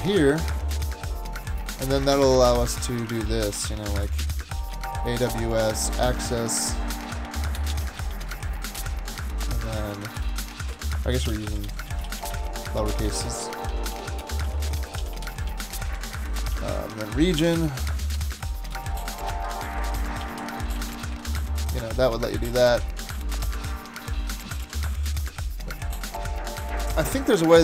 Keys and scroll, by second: 0.4 super+a, 0.7 super+x, 2.1 super+v, 3.7-8.8 typing, 9.2 Down, 10.2 alt+BackSpace, 10.5-16.0 typing, 13.7 Left, 13.9 Left, 16.7 Down, 16.9 Left, 17.4 alt+BackSpace, 17.6 alt+BackSpace, 17.8 alt+BackSpace, 18.7 alt+BackSpace, 18.9-21.8 typing, 22.0 Down, 22.1 Down, 22.4 Down, 22.7 Down, 22.8 Down, 24.6 super+s.